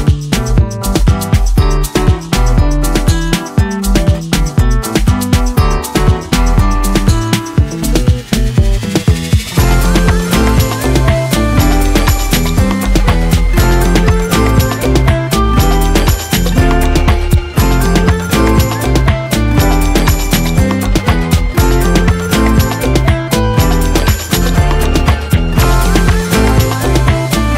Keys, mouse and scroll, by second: 0.0 right click, 0.1 click, 0.7 v, 1.0 space, 2.2-4.4 ctrl+drag, 5.2 right click, 5.6 click, 6.1 space, 6.3 right click, 6.4 right click, 6.7 click, 10.9 click, 13.0 b, 13.9 right click, 15.0 click, 18.7 right click, 19.7 click, 21.7-23.0 typing, 27.1-27.5 typing.